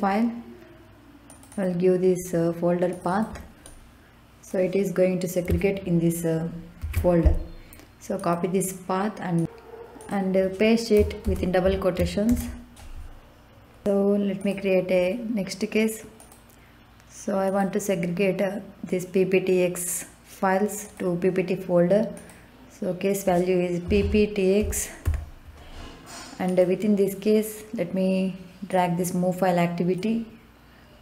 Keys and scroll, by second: 6.8 ctrl+c, 11.2 shift+', 12.2 ctrl+v, 23.8 p, 24.6 t, 25.0 x.